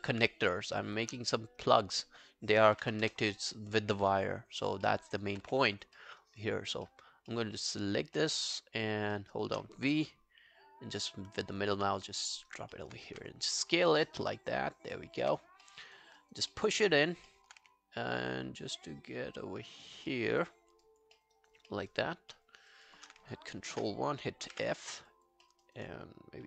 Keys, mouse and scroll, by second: 2.5-3.4 typing, 4.9 alt+middle click, 5.1 alt+right click, 5.5 w, 6.0 alt+middle click, 6.2 alt+right click, 6.4 alt+click, 6.9 alt+middle click, 7.3 alt+middle click, 7.7-8.2 alt+scroll up 6, 8.2 alt+middle click, 8.5 alt+scroll down 1, 9.2 alt+middle click, 10.8-11.4 v, 11.4 middle click, 11.5-11.9 v, 12.0 scroll down 3, 12.3 alt+click, 12.5 alt+right click, 12.7 alt+middle click, 13.1 r, 15.2 w, 15.4 scroll up 1, 15.6 alt+middle click, 15.9 alt+right click, 16.2 alt+right click, 16.5 alt+middle click, 16.7 alt+right click, 17.0 alt+click, 17.3 alt+middle click, 17.6 w, 19.9 alt+scroll down 1, 20.1 alt+middle click, 20.4 alt+right click, 20.6 alt+scroll down 1, 20.9 alt+click, 21.2 alt+middle click, 21.4 alt+right click, 21.7 alt+middle click, 21.9 alt+right click, 22.4 alt+middle click, 22.6 alt+right click, 22.9 alt+click, 24.9 f, 25.1 alt+click, 25.5 alt+middle click, 25.7 alt+right click.